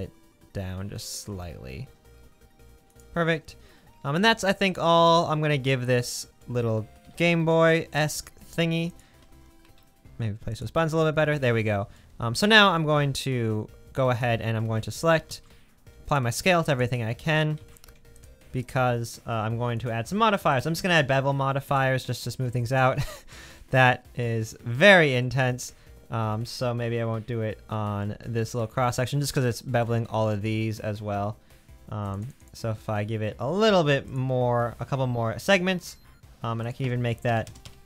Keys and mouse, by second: 5.5-6.1 middle drag, 7.0 g, 9.2 g, 15.3 ctrl+a, 16.7 click, 17.6 ctrl+a, 18.2 middle click, 19.8 click, 20.6-22.7 drag, 23.8 middle click, 25.7 Tab, 28.6 middle click, 29.6 middle click.